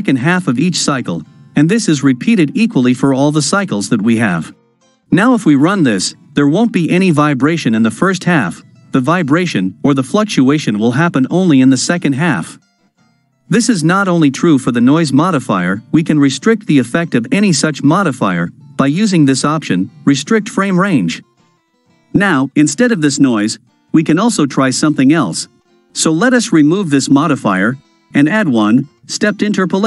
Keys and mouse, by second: 5.1 shift+Left, 5.5 space, 23.4 space, 27.0 click, 28.2-29.6 drag.